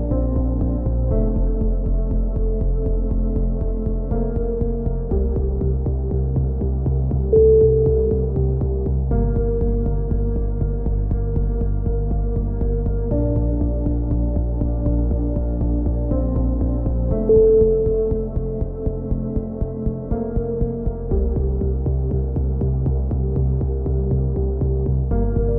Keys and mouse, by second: 0.5 a, 1.1 right click, 1.5 KP_7, 3.3 click, 3.8 KP_3, 4.4 KP_7, 5.0 s, 5.6 click, 6.8 KP_3, 7.6 s, 8.3 click, 9.8 right click, 10.0 click, 10.8 right click, 11.0 click, 11.7 click, 12.3 right click, 12.5 click, 13.0 click, 14.8 g, 15.4 a, 15.8 right click, 16.2 e, 17.8 a, 18.9 right click, 19.2 KP_7, 19.7 click, 20.8 KP_3, 21.0 a, 21.4 click, 21.6 right click, 22.0 e, 23.4 e, 25.4-25.5 right drag.